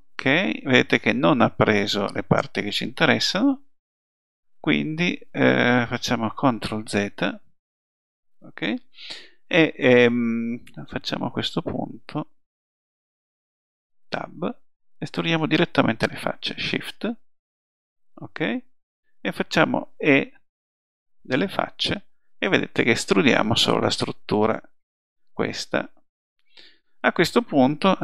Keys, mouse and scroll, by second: 6.8 ctrl+z, 17.9 middle click, 18.0 middle click, 20.3 e.